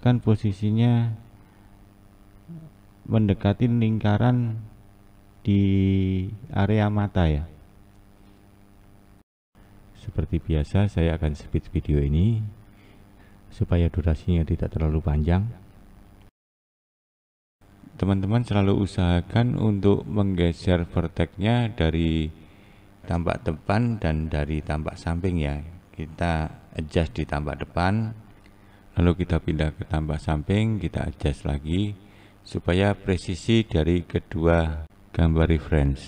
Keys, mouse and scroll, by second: 3.0 click, 5.4-7.4 scroll up 1, 7.4 click, 8.4 click, 10.7 click, 13.3 click, 13.7 click, 15.5 click, 16.0 click, 16.5 click, 16.6 click, 16.9 click, 17.0 click, 17.5 click, 17.6 click, 17.9 click, 18.0 click, 19.0 click, 19.2 click, 20.0 click, 20.2 click, 20.5 click, 20.8 click, 20.9 click, 21.1 click, 21.4 click, 21.7 click, 21.9 click, 22.2 click, 22.3 click, 23.0 click, 23.1 click, 23.8 click, 24.0 click, 24.3 click, 24.6 r, 25.0 click, 25.2 click, 25.3 click, 25.5 click, 25.7 click, 26.2 click, 26.3 click, 27.0 click, 27.2 click, 28.2 click, 28.2 click, 28.5 click, 28.8 click, 28.8 click, 29.2 click, 29.4 click, 29.8 click, 30.2 click, 30.4 click, 30.7 click, 30.9 click, 31.6 click, 32.1 scroll down 2, 32.2 scroll up 1, 32.5 scroll down 1, 32.6 click, 33.1-33.4 scroll up 1, 33.4 click, 33.6 click, 34.4 scroll up 1, 34.6 click.